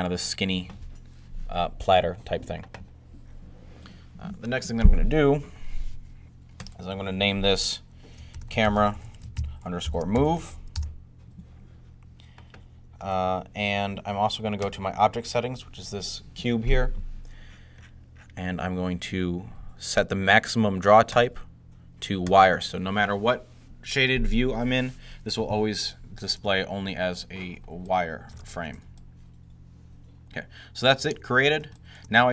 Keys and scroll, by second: 0.4 2, 7.9-10.7 typing.